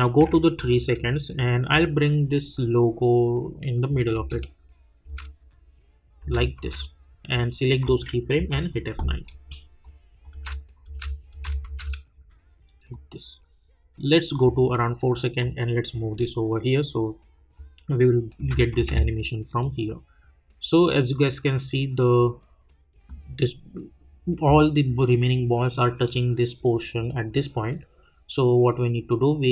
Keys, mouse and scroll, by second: 1.3 j, 1.7 click, 4.1 space, 7.3 click, 8.4 F9, 9.2 click, 10.3 space, 12.9 click, 18.4 space, 19.6-29.5 drag.